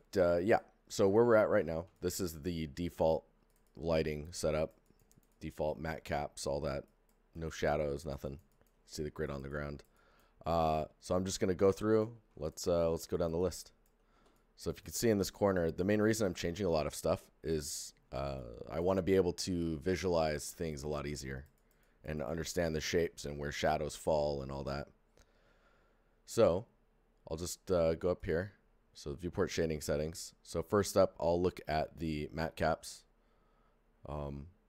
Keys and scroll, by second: 1.5 alt+f, 12.0 alt+f.